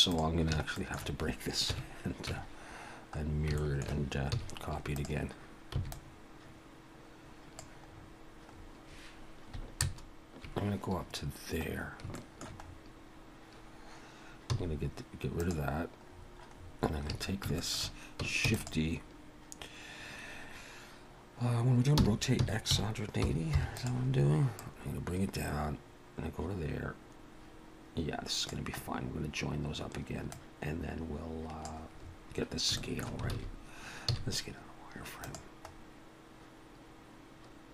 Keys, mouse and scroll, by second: 0.1 click, 0.7 shift+middle click, 1.7 KP_1, 2.3 Tab, 3.2 scroll up 1, 3.6 shift+middle click, 4.3 z, 5.7 b, 7.9-8.7 scroll up 7, 9.8 ctrl+KP_Add, 11.0 scroll down 4, 11.6-12.1 scroll up 3, 12.1 shift+middle click, 12.6-14.5 scroll up 2, 14.5 x, 16.1-16.9 scroll down 9, 17.1 a, 17.6 shift+middle click, 18.5 shift+d, 22.0 r, 24.6 click, 28.9-30.3 scroll up 4, 30.3 click, 32.0-32.8 scroll up 6, 32.8 shift+middle click, 33.3 alt+a, 34.1 z, 35.7-36.2 scroll up 2.